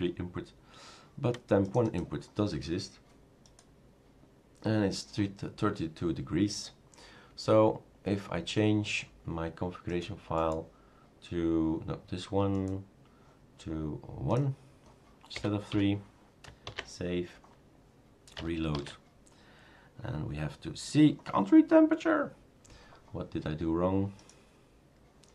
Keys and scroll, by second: 15.3 Delete, 15.7 1, 16.6 ctrl+s, 18.8 shift+super+r.